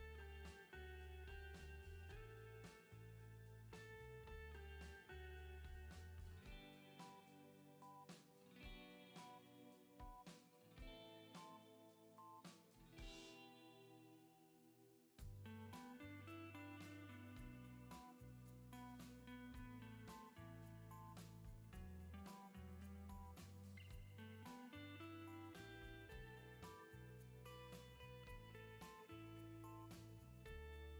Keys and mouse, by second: 2.4 ctrl+z, 4.8 middle click, 5.8-9.3 middle drag, 7.9 ctrl+z, 9.5-11.7 middle drag, 9.9 ctrl+z, 10.5 ctrl+z, 11.7 ctrl+z, 11.7-17.3 drag, 19.9 ctrl+z, 20.6 ctrl+z, 25.8 ctrl+z, 30.0-30.9 middle drag.